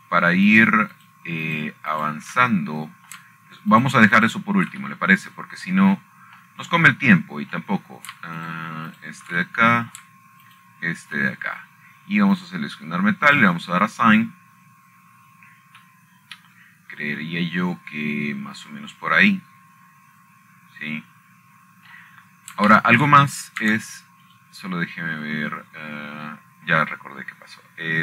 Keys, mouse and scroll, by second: 1.4 shift+middle click, 1.7-3.1 shift+drag, 3.2-4.8 shift+drag, 5.9 shift+middle click, 6.5 shift+click, 6.9 shift+click, 8.4 middle click, 8.6-10.0 scroll down 3, 10.5-11.1 scroll down 2, 10.6 middle click, 11.1 shift+click, 11.6 shift+click, 12.7 shift+middle click, 13.2 shift+click, 15.1 click, 16.0 click, 24.4 middle click, 24.9-25.3 scroll up 1, 25.8-27.0 shift+middle drag, 27.0 right click.